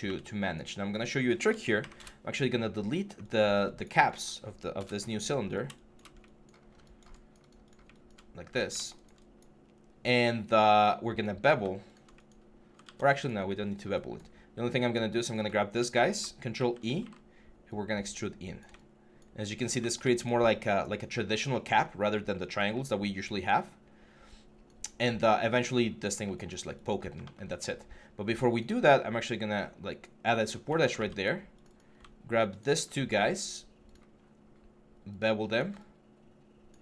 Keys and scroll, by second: 1.6 ctrl+F11, 1.7 ctrl+BackSpace, 2.5 4, 4.5 BackSpace, 5.2 6, 12.6 ctrl+z, 16.3 ctrl+e.